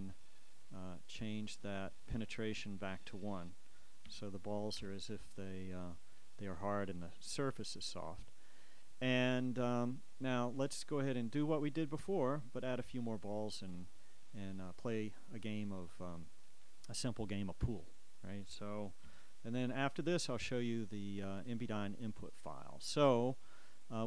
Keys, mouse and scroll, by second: 0.3 click, 1.5 click, 3.0 shift+click, 4.2 1, 5.0 Return, 6.3 click, 13.9-15.8 drag, 19.2 a, 21.7 click, 23.6 click.